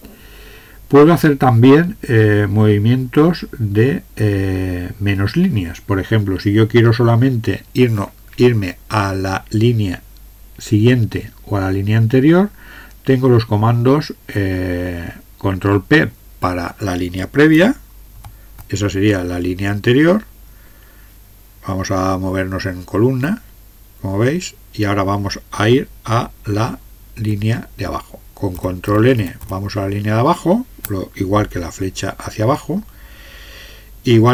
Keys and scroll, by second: 18.2 ctrl+p, 22.3-23.0 Right, 23.4 Right, 27.2 ctrl+n, 28.6 ctrl+n, 28.9 ctrl+n, 29.2 ctrl+n, 29.6 ctrl+n, 31.8 Down, 34.2 Up.